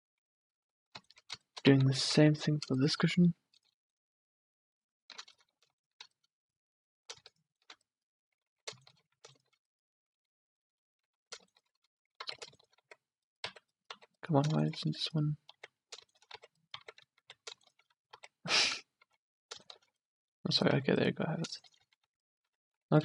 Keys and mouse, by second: 2.4 a, 8.5 ctrl+z, 11.2 ctrl+z, 12.2 ctrl+z, 12.9 z, 13.6 z, 14.1 z, 15.7 z, 16.5 z, 16.9 z, 18.2 z, 19.1 ctrl+z, 20.8 z, 21.9 z, 22.2 z, 22.6 z.